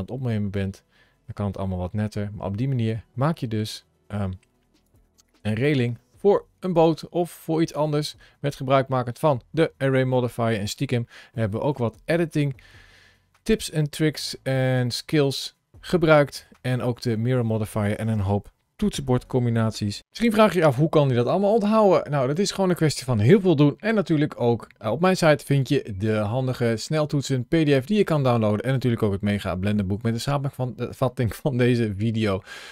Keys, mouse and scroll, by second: 4.7 click, 5.4 scroll up 1, 5.8 middle click, 8.9 middle click, 10.1 middle click, 11.2 middle click, 14.1 middle click.